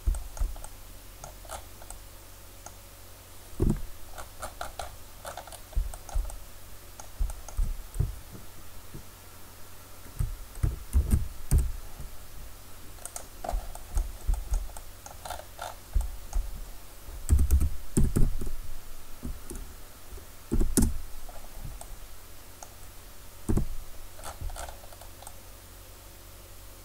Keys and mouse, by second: 3.6 KP_Decimal, 11.0 shift+d, 13.8-15.5 drag, 17.3 r, 23.5 KP_Decimal.